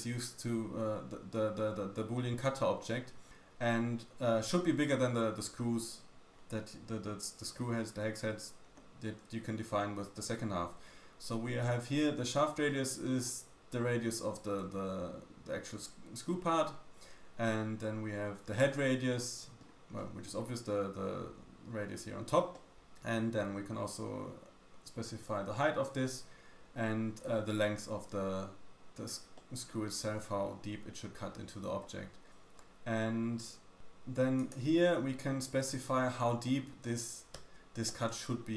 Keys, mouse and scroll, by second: 12.7 middle click, 19.2 middle click, 20.0 middle click, 22.5 middle click, 29.4 middle click, 34.3 click, 37.8 middle click.